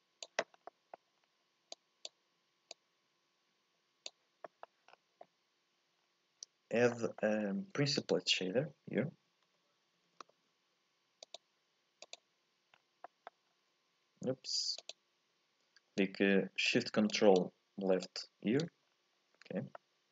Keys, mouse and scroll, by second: 0.5 scroll up 2, 0.7 middle click, 1.2-1.7 scroll down 2, 1.7 click, 2.7 click, 4.5 middle click, 4.9-5.5 scroll down 1, 5.5-6.3 scroll up 4, 6.9 middle click, 7.6 shift+a, 12.7-13.0 scroll down 1, 13.0 middle click, 13.5-14.9 scroll up 1, 14.9 ctrl+shift+click, 16.0-18.9 drag, 18.9 scroll down 1, 19.2-19.8 scroll up 1, 19.8-20.1 middle drag.